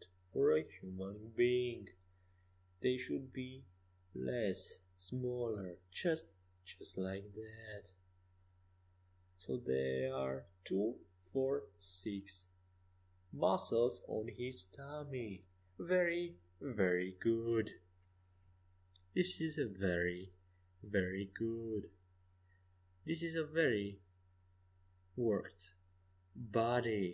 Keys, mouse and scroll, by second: 1.3-3.2 drag, 2.6-5.8 middle drag, 5.8-8.0 right drag, 7.2 e, 8.0 middle click, 8.0 s, 10.8 middle click, 12.9-14.0 drag, 14.0 right click, 15.7 middle click, 16.6-19.0 right drag, 18.2 click, 19.0 middle click, 19.3 click, 19.5 middle click, 19.9 right click, 20.3-21.4 middle drag, 21.8-23.3 middle drag.